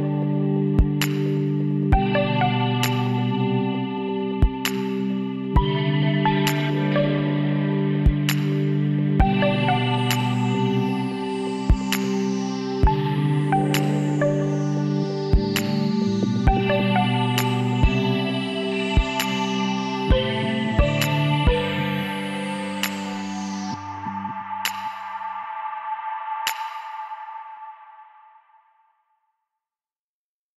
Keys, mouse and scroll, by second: 0.7-2.4 drag, 4.1-5.9 drag, 6.0-10.4 middle drag, 11.0 g, 14.7-17.0 middle drag, 17.2-19.1 middle drag, 19.1 Tab, 22.3-25.0 middle drag, 24.7 Tab, 27.7 a.